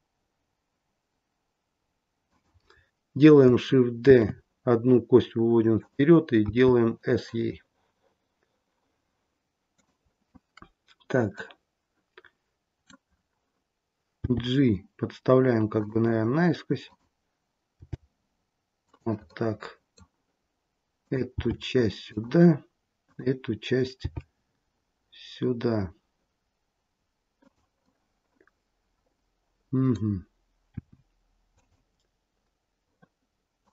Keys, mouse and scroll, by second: 4.1 shift+d, 6.4 s, 11.3 middle click, 13.0-14.1 scroll down 1, 14.1-15.7 scroll down 1, 14.1 g, 16.7 click, 17.7 g, 19.2 middle click, 20.9 click, 21.3 g, 22.9 click, 23.9 g, 27.7 middle click, 30.8 r, 33.5 click.